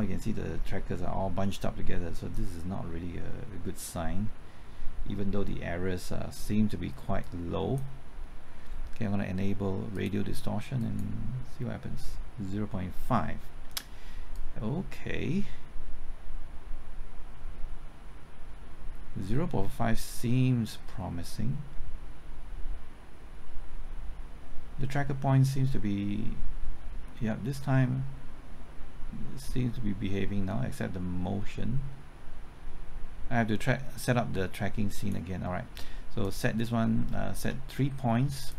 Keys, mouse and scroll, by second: 37.1 typing, 38.4 shift+click.